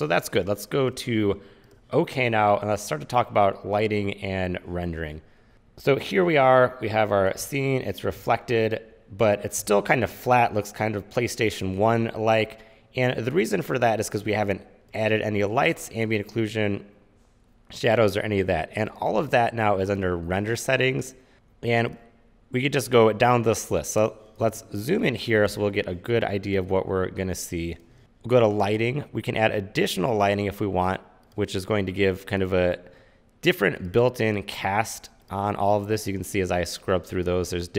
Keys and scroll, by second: 7.6 c, 8.9 c, 24.6 z, 26.7 space.